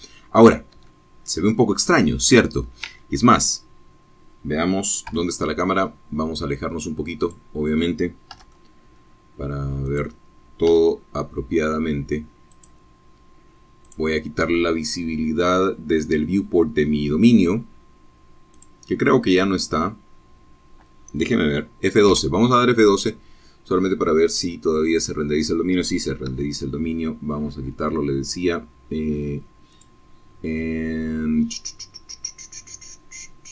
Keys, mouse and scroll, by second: 2.5 KP_0, 4.6 click, 5.8 g, 5.9 click, 7.3 click, 8.1 g, 10.0 click, 11.3 click, 16.0 click, 16.3-18.0 middle drag, 19.5 F12, 23.7 Escape, 24.8-25.4 scroll down 2, 27.2 click, 31.5 click.